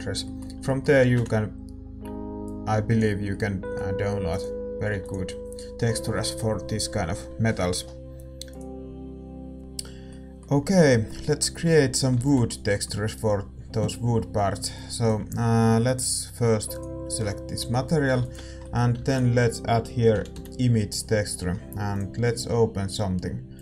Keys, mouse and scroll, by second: 4.9 ctrl+s, 9.6-14.8 middle drag, 12.4 ctrl+s, 14.8-23.6 drag.